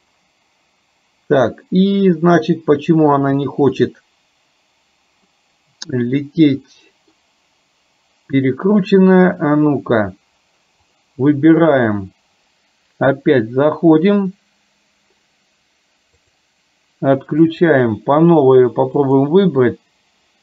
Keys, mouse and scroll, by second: 5.4-7.1 middle drag, 16.2 click, 17.5 click.